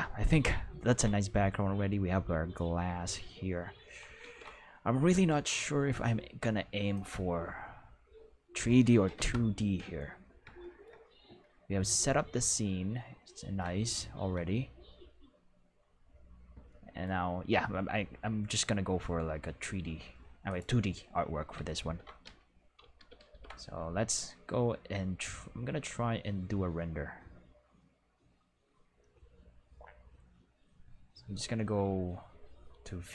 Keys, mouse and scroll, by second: 4.2 ctrl+s, 5.2 right click, 6.9 click, 9.1 Home, 10.7 shift+middle click, 11.6 shift+middle click, 12.1-12.4 middle drag, 16.9-20.4 shift+middle drag, 20.4 click, 21.8 ctrl+s, 22.2 q, 22.9 ctrl+s, 23.1 ctrl+s, 33.0 click.